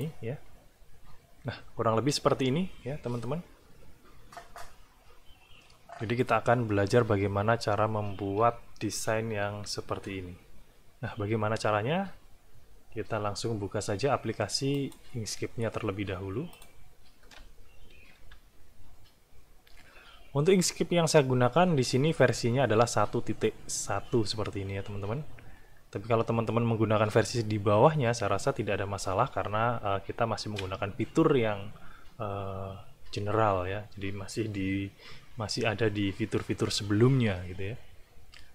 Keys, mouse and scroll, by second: 14.8 click, 16.5 click, 18.2 i.